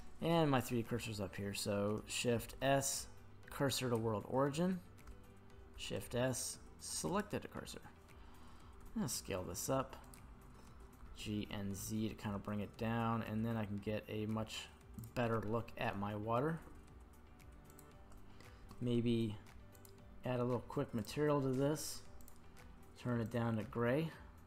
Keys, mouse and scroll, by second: 2.3 shift+s, 5.7 shift+s, 8.8 s, 10.0 click, 11.0 g, 11.5 z, 15.0 click, 15.4 middle click, 16.5 s, 17.7 click, 19.7 click, 21.0 click, 22.2 click.